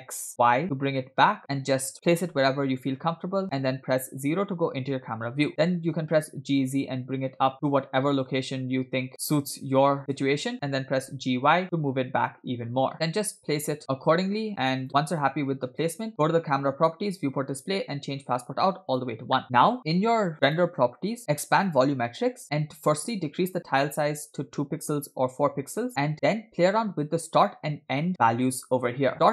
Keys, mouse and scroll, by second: 2.8 scroll up 1, 4.1 KP_0, 5.6 g, 10.9 g, 15.0-15.7 scroll down 2, 15.7-17.1 scroll up 2, 17.1 click, 17.4-18.3 scroll down 2, 18.3 click, 19.5 scroll down 1, 20.5 click, 21.6 click, 22.0-22.4 scroll down 3, 23.0-24.4 drag.